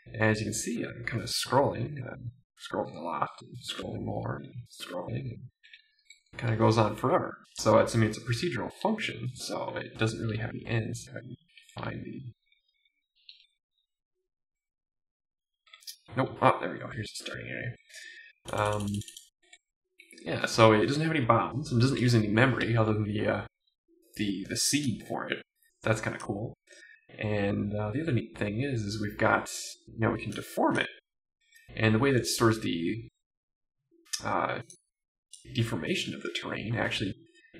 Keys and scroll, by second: 0.4 Down, 1.7 Right, 1.9 Down, 3.2 Down, 3.8 Down, 4.0 Down, 4.3 Left, 4.4 Right, 4.7 Down, 4.9 Down, 5.1 Right, 5.2 Right, 5.5 Left, 5.9 Up, 6.1 Right, 6.5 Left, 6.9 Right, 7.5 Left, 8.3 Right, 8.7 Up, 9.1 Left, 9.4 Up, 9.8 Up, 10.2 Up, 10.7 Right, 11.0 Up, 11.5 Right, 11.6 Up, 11.9 Left, 12.3 Right, 13.1 Up, 13.4 Left, 13.8 Down, 14.7 Left, 16.3 Down, 16.9 Right, 17.4 Left, 17.7 Right, 19.5 Left, 20.0 Right, 27.2 Down, 27.9 Down, 36.0 Left, 36.4 Down.